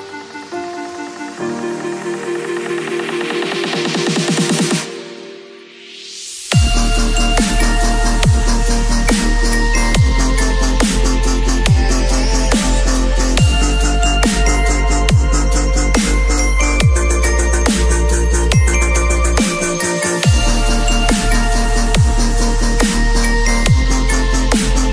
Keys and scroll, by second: 4.8 ctrl+l, 8.1 Return, 8.7 ctrl+u, 12.0 Return, 15.5 b, 16.4 [, 21.4 ].